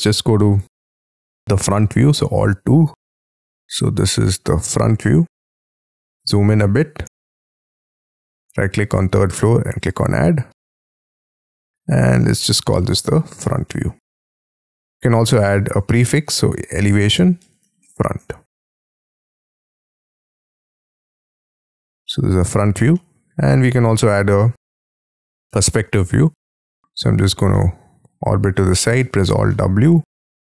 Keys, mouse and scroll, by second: 2.1 alt+2, 3.2-5.1 scroll up 13, 5.1-6.2 scroll up 2, 6.2 scroll up 1, 6.4-8.8 scroll down 1, 8.8 right click, 11.9 double click, 12.1 double click, 13.0 ctrl+a, 13.1-18.4 typing, 22.9 middle click, 24.3-25.1 scroll down 4, 25.4 middle click, 26.0 scroll down 4, 26.3 middle click, 27.5 middle click, 29.0 alt+w, 29.4 middle click.